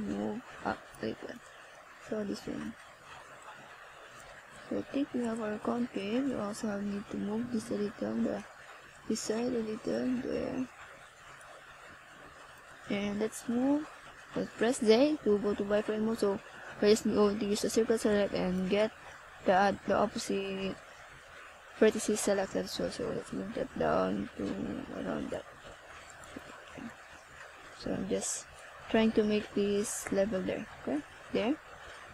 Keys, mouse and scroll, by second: 12.5 click, 14.6 right click, 23.3 click, 28.4 click, 29.8 click.